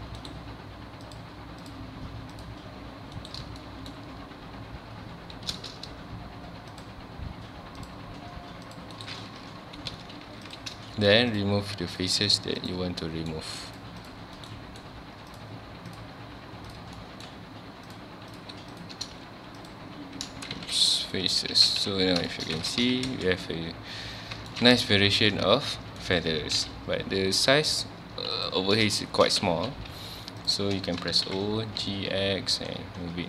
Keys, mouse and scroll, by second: 3.6-6.7 shift+middle drag, 10.0 space, 10.2 3, 10.5 click, 11.3 shift+click, 11.9 shift+click, 12.6 shift+click, 13.0 shift+middle click, 13.8 shift+click, 14.0 shift+click, 14.4 shift+right click, 14.5 shift+middle click, 15.3 shift+click, 15.9 shift+click, 16.7 shift+click, 17.0 shift+middle click, 17.9 shift+click, 18.3 shift+click, 18.7 shift+click, 19.1 x, 20.3 ctrl+z, 20.6 x, 21.5 alt+a, 22.1 scroll down 1, 22.3 shift+middle click, 22.6 alt+a, 22.8 Tab, 23.1 alt+a, 23.3 scroll down 1, 23.4-24.8 middle drag, 24.8 click, 25.0 h, 25.3-26.6 middle drag, 26.6 KP_1, 27.1-28.4 scroll up 1, 28.4 click, 29.0-29.4 shift+middle drag, 29.4 Tab, 29.8 1, 30.4 click, 31.3 o.